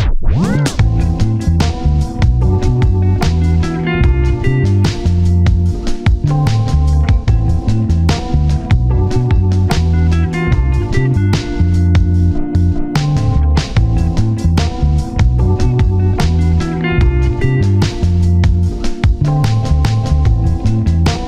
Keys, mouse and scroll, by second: 1.9 shift+click, 3.4 shift+click, 6.0 shift+click, 9.6 scroll down 1, 9.9 1, 10.1-10.4 scroll up 1, 10.4 scroll down 1, 12.4-13.3 scroll up 1, 14.4 alt+click, 15.4 ctrl+z, 16.1 shift+click, 16.7 s, 19.6 double click, 19.8-20.3 scroll down 1, 20.8-21.1 scroll up 1, 21.1-21.2 scroll down 2.